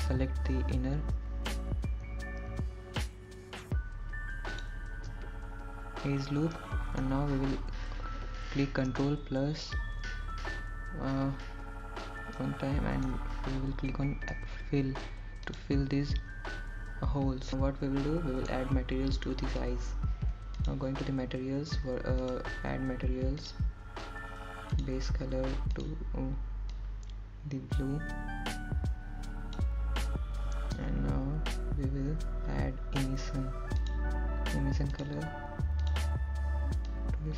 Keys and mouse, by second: 9.6 middle click, 12.0 ctrl+KP_Add, 15.5 middle click, 17.5 f, 18.5 click, 20.6-21.8 middle drag, 23.3 d, 23.8 click, 25.4 click, 26.6 click, 27.9 click, 29.0 click, 37.0 click.